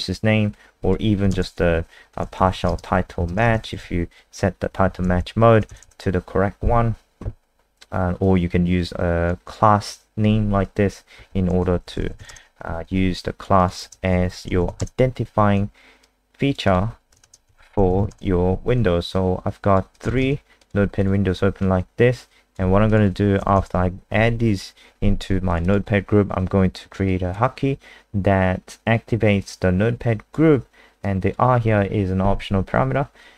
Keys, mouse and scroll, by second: 1.9-4.3 typing, 4.8 ctrl+shift+Left, 5.0 ctrl+shift+Left, 5.1 ctrl+shift+Left, 5.6 BackSpace, 5.8 BackSpace, 8.2 click, 11.6-12.7 typing, 13.2 alt+click, 13.6 click, 13.8 ctrl+alt+space, 14.0-15.2 typing, 16.0 alt+click, 16.6 alt+click, 17.2 ctrl+alt+space, 17.3-18.5 typing, 19.1 alt+click, 19.9 click, 20.2 ctrl+alt+space, 20.6 click, 21.0 click, 21.6 click, 22.6 ctrl+c, 22.9 click, 23.4 Return, 23.5 Return, 23.8 ctrl+v, 24.1 ctrl+s, 25.4 click, 25.6 click, 27.0 click.